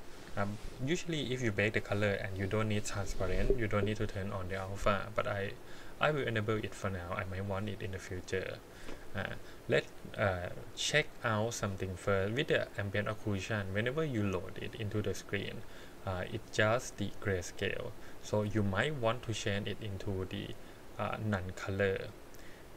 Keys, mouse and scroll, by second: 11.3 scroll up 3, 11.8 middle click, 12.6 click, 17.9-22.7 drag.